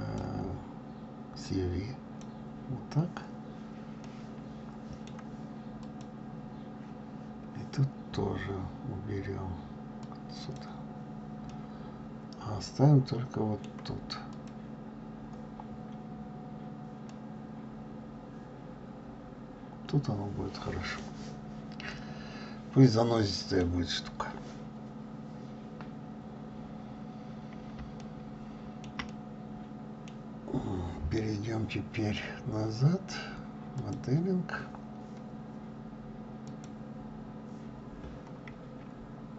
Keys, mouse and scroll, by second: 2.4-6.1 drag, 10.8 click, 11.7-14.4 middle drag, 14.4 click, 17.4-20.3 middle drag, 21.4-22.0 scroll down 1, 22.0 scroll down 1, 22.1-24.7 middle drag, 24.7-25.7 scroll up 3, 25.7 scroll up 1, 25.8-26.4 scroll down 2, 26.6-27.5 scroll up 2, 28.2-29.9 shift+middle drag, 33.7 click, 36.5 click, 37.8-38.2 scroll down 3, 38.2-39.0 scroll up 9.